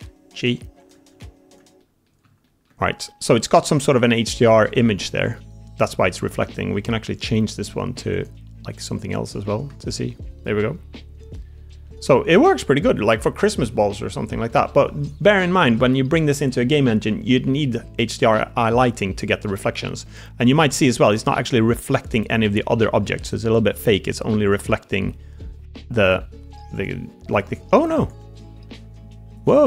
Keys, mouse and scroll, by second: 0.7 click, 1.0 Tab, 1.4 click, 1.7 middle drag, 2.3 shift+middle click, 3.0-4.4 middle drag, 5.2-5.6 middle drag, 7.0-9.6 drag, 9.8-11.7 middle drag, 10.9-11.2 drag, 10.9-11.2 right drag, 11.7 click, 12.4-12.7 drag, 13.3 middle drag, 13.3 click, 13.3 middle click, 13.5 middle click, 15.3 middle drag, 15.4 click, 15.5 middle click, 15.6 click, 17.2 middle drag, 18.1-18.7 middle drag, 20.0-20.7 middle drag, 21.0-22.1 middle drag, 22.8 shift+middle drag, 22.9 shift+click, 22.9 shift+middle drag, 23.1-26.2 middle drag, 26.9 g, 28.1 middle click, 28.5 click, 28.6 g, 29.5 drag.